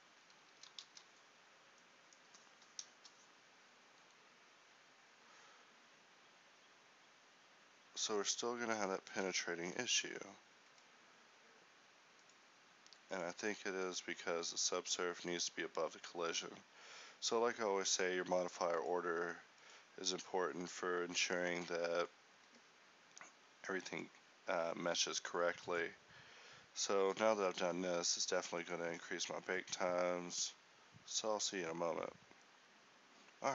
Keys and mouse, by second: 0.4 Tab, 1.0 a, 9.8 Escape, 13.0-22.4 drag, 22.4 a, 33.3 Escape.